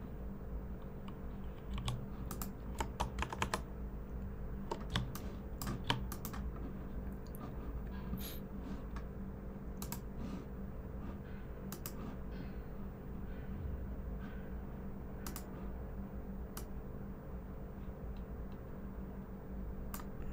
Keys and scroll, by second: 1.7 v, 3.2 super+=, 3.3 super+=, 4.9 space, 5.4 space, 5.5 space.